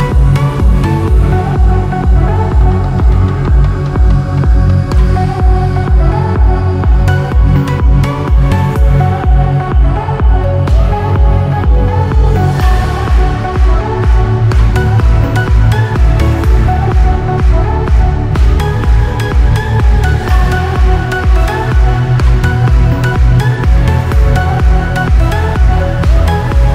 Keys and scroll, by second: 7.4 ctrl+j, 7.6 ctrl+e, 12.9 ctrl+j, 13.0 ctrl+e, 13.8 ctrl+j, 24.4 ctrl+e.